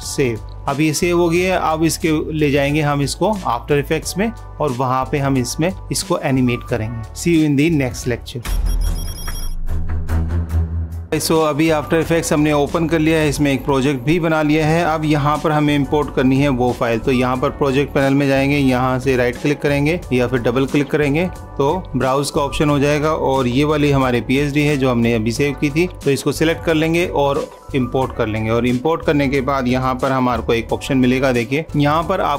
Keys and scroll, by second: 0.5 super+-, 21.8 super+-, 30.7 super+=.